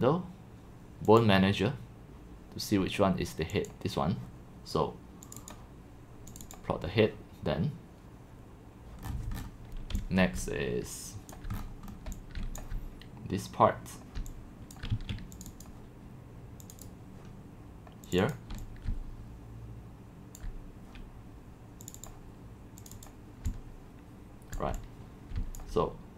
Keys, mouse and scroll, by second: 0.2-4.2 drag, 5.5 click, 6.7-9.1 drag, 9.1 middle click, 9.1-9.5 scroll, 10.1-12.4 typing, 11.3 click, 11.5-12.1 scroll down 8, 12.6-14.2 drag, 14.2-15.5 typing, 15.4 click, 15.6 click, 16.7 click, 17.3-18.5 drag, 18.5-20.5 typing, 20.3 click, 21.9 click, 23.0 click, 23.0 click, 23.5-24.6 c, 24.6 click, 24.7 x, 25.4 c, 25.6 click.